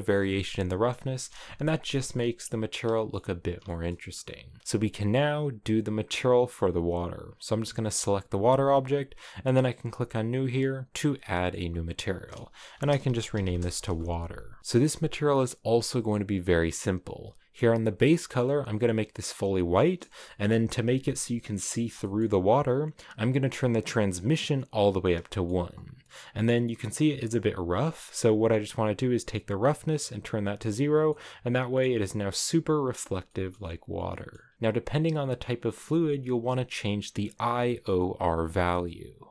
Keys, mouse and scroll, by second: 0.6 KP_0, 1.7 shift+middle click, 2.1-3.0 scroll up 1, 3.0 shift+middle click, 3.2-3.6 scroll down 1, 3.6-6.7 shift+middle drag, 6.7-10.4 right drag, 10.4-14.1 drag, 14.1 a, 18.8 click, 19.8 scroll up 2, 20.1-24.2 shift+middle drag, 24.2-25.3 drag, 25.3 shift+middle click, 25.5-27.8 scroll up 6, 29.7 click, 31.0 shift+middle click, 31.5 shift+middle click, 32.4 shift+middle click, 32.9-33.3 scroll down 3, 33.3-34.5 shift+middle drag, 33.9 scroll down 1, 37.9-39.3 shift+drag.